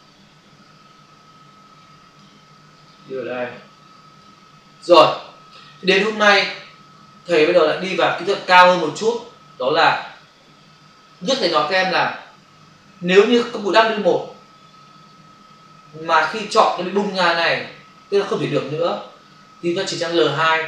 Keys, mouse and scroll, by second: 2.9 click, 7.7 space.